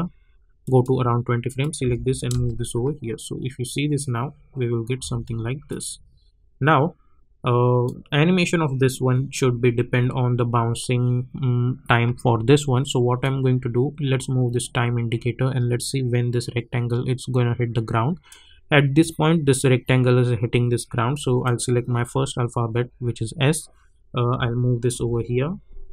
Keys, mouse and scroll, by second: 0.6 click, 1.8 [, 2.3 space, 5.0 space, 5.7-11.9 drag, 13.2-21.4 drag, 24.9 [.